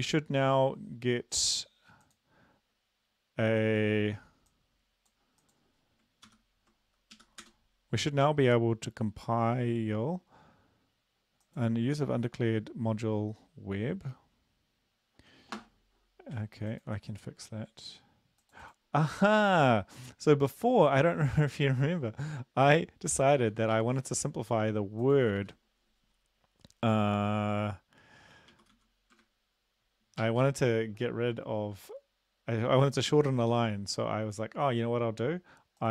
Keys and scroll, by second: 6.2 ctrl+c, 7.2 Up, 7.4 Return, 23.7 Left, 25.4 ctrl+`, 28.5-30.2 typing.